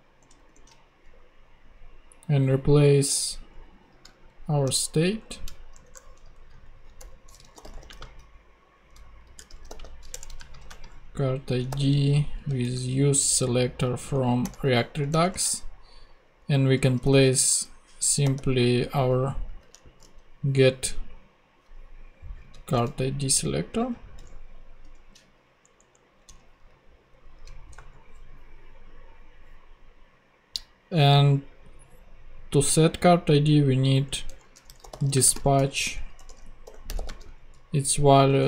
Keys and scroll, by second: 0.2 ctrl+Tab, 4.1 super+Left, 4.6 shift+super+Left, 5.2 shift+super+Down, 5.7 shift+Down, 5.8 shift+BackSpace, 6.3 Up, 6.6 super+Right, 7.0 super+Return, 7.3-8.1 typing, 9.2-13.1 typing, 10.1 Return, 14.1 Down, 14.4 Return, 15.1 shift+Return, 15.2 shift+9, 16.8-18.2 typing, 19.6 ctrl+Tab, 22.7 ctrl+super+c, 22.7 ctrl+super+Tab, 23.6 ctrl+Tab, 23.7 ctrl+super+v, 24.8 alt+super+Return, 25.6 alt+Down, 26.2 Return, 27.3 super+Right, 27.7 super+;, 28.5 ;, 34.3 Return, 34.4-37.4 typing.